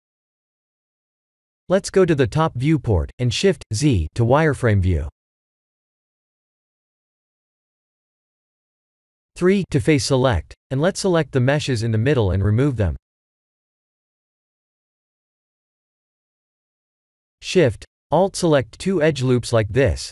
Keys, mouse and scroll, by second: 0.0 KP_1, 0.4 KP_7, 1.3-1.6 scroll up 4, 2.1 Tab, 2.5-3.0 scroll up 4, 3.0 Tab, 3.8 click, 4.1 shift+z, 5.8 b, 6.9 3, 7.3 b, 12.7 x, 14.1 shift+z, 14.6 middle click, 15.4 middle click, 15.4 2, 15.9 alt+click, 17.3 alt+shift+click, 18.4 ctrl+e.